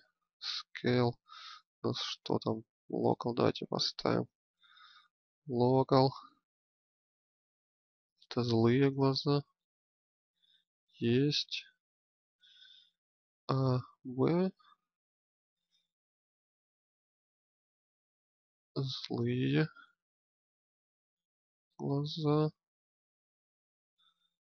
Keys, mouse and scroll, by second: 1.9 click, 13.1 a, 13.7 b, 15.6-17.9 drag, 19.2 click, 21.0 click, 22.2-23.4 drag.